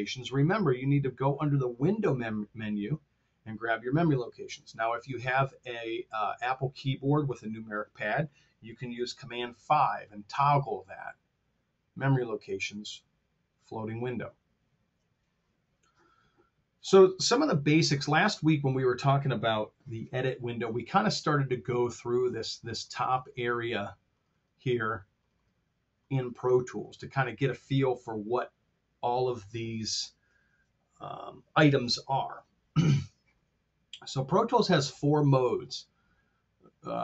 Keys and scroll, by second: 9.2 super+KP_5.